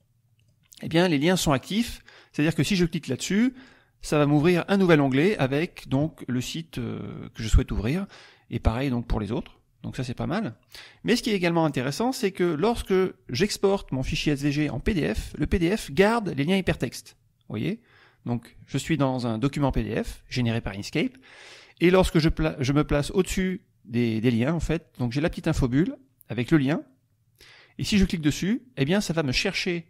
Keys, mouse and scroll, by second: 1.3 click, 3.5 click, 7.0 click, 8.6 click, 10.4 middle click, 10.9 click, 15.2 click, 27.9 click.